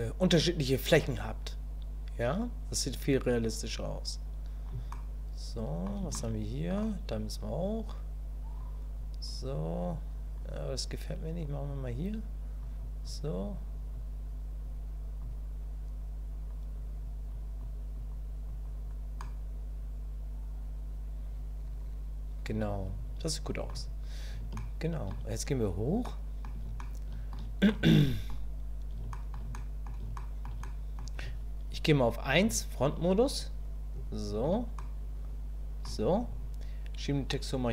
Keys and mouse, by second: 0.6-4.6 drag, 4.9 click, 6.1 shift+click, 7.6-8.6 drag, 9.0 click, 9.5 click, 10.4-11.7 drag, 12.6 click, 13.4 click, 13.9-15.2 drag, 16.5 click, 17.3 click, 18.0 click, 18.5 click, 19.2-23.7 middle drag, 24.6 shift+middle click, 26.0 middle click, 26.8 shift+middle click, 27.7 middle click, 29.1 shift+click, 29.6 click, 30.2 shift+click, 30.7 click, 32.4 KP_1, 34.8-35.8 shift+drag, 37.0-37.7 drag.